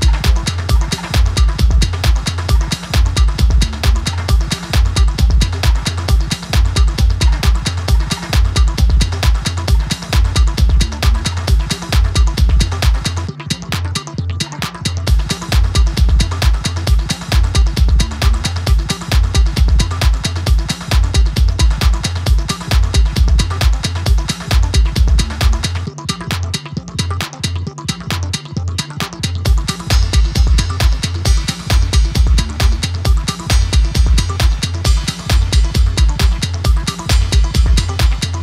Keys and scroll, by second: 18.2 super+c, 18.5 super+v, 34.8 d.